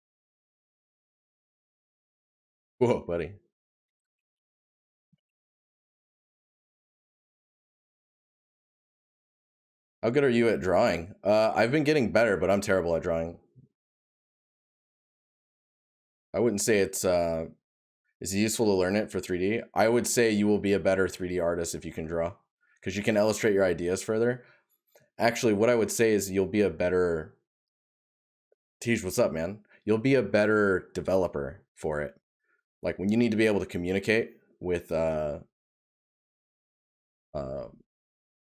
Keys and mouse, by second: 8.8 right click, 10.6 right click, 12.8 right click, 14.7 right click, 19.0 right click, 23.2 right click, 31.8 right click.